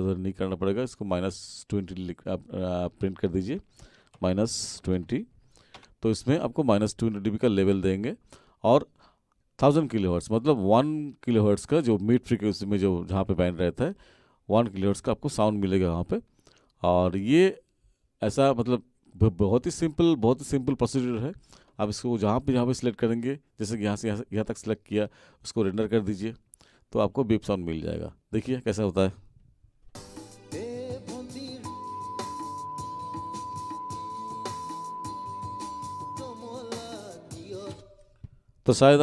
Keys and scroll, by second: 4.1-5.4 typing, 5.7 Return, 29.8 space, 37.7 space.